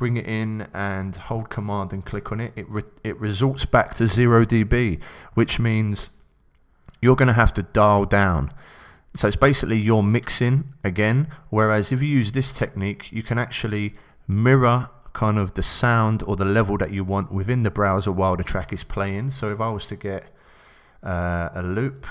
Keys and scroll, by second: 21.0 Left, 21.7 Down.